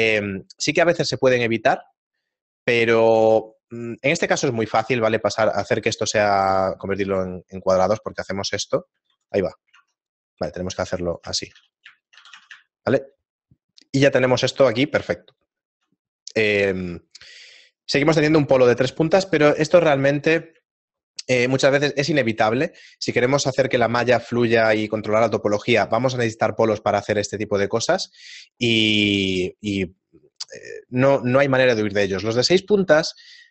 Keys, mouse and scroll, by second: 4.5 ctrl+Tab, 6.1 right click, 6.7 shift+right click, 7.0 shift+right click, 7.5 shift+middle click, 8.7 ctrl+x, 9.4 ctrl+z, 9.7 ctrl+Tab, 10.3 right click, 10.7 right click, 10.9 f, 11.0 right click, 11.3 shift+right click, 11.5 f, 11.7 right click, 12.0 shift+right click, 12.1 f, 12.3 a, 12.7 shift+middle click, 15.4 shift+middle click, 20.7 shift+middle click.